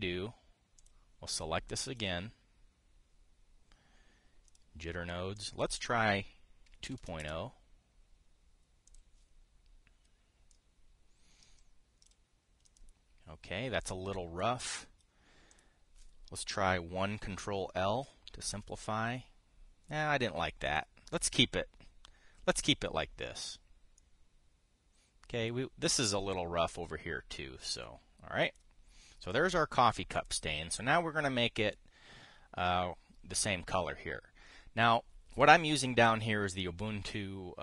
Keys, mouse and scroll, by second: 0.4 click, 1.5 click, 2.6 click, 5.2 click, 6.0 click, 7.4 KP_2, 7.5 KP_Decimal, 7.7 KP_0, 9.6 click, 11.2 click, 16.2 click, 18.7 ctrl+l, 21.4 click, 21.8 click, 24.1 click, 24.7-26.3 drag, 26.6-29.4 drag, 29.9 click, 30.8 click.